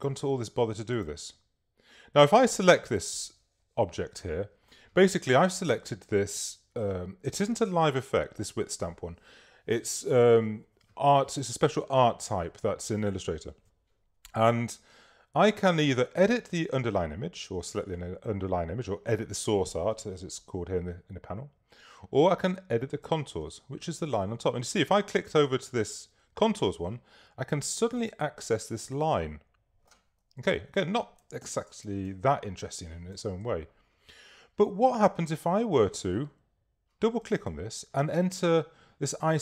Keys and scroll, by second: 30.5 super++, 32.0 super+space.